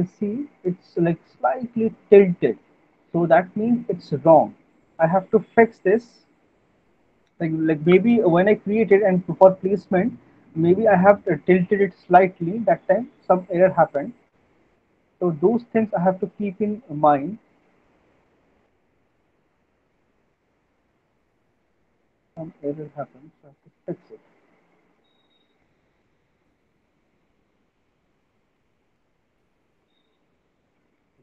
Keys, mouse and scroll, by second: 1.1 middle click, 1.4 middle click, 2.2 middle click, 5.0 click, 6.0 click, 7.3 middle click, 13.6 click, 13.6 middle click, 14.6 click, 15.1 middle click, 15.3 middle click, 15.9 middle click, 17.1 middle click, 19.2 click, 20.0 middle click, 20.4 middle click, 20.8 middle click, 21.2 middle click, 22.2 middle click, 23.1 middle click, 25.3 click, 26.3 click, 30.3 click, 30.3 middle click.